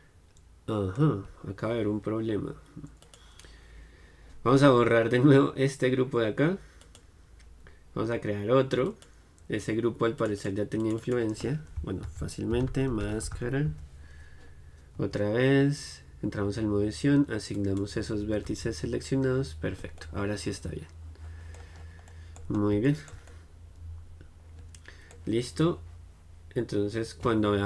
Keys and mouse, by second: 15.9 Tab, 17.7-19.5 drag, 19.3 Tab, 20.1-27.6 middle drag.